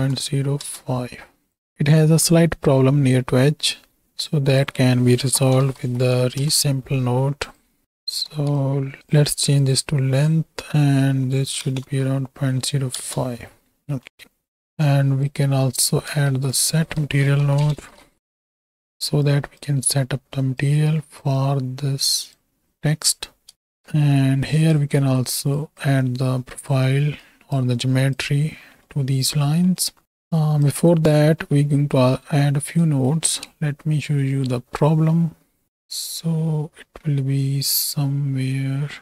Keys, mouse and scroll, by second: 1.5 click, 4.3-6.4 drag, 7.8 click, 8.3 ctrl+x, 8.5 ctrl+click, 9.0-9.7 drag, 10.2-13.0 drag, 14.0 middle click, 14.5 right click, 15.0 right click, 16.3 shift+a, 18.8 click, 19.2 right click, 19.9 right click, 21.0 right click, 21.4-22.4 right drag, 25.1 shift+d, 25.6 click, 26.2 click, 27.2 right click, 27.8 right click, 28.8 middle click, 29.6 middle click, 30.3 right click, 30.8 right click, 32.5 shift+a, 33.5 space.